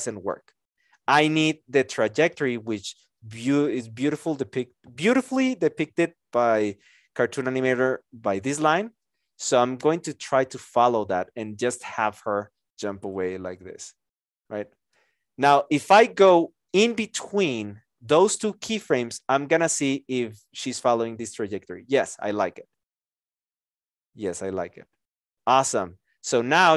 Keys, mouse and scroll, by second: 26.7 (.